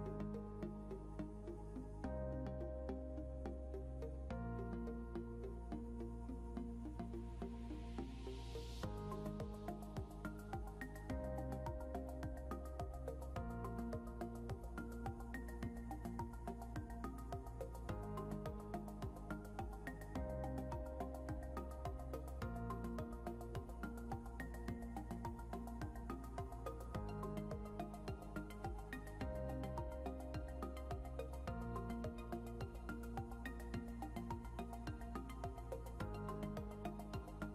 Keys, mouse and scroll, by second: 1.2 scroll down 1, 2.1 click, 10.0 click, 16.8 click, 21.8 shift+j, 23.8 ctrl+j, 25.2 ctrl+z, 26.1 ctrl+z, 26.6 click, 32.8 click, 34.9 ctrl+l.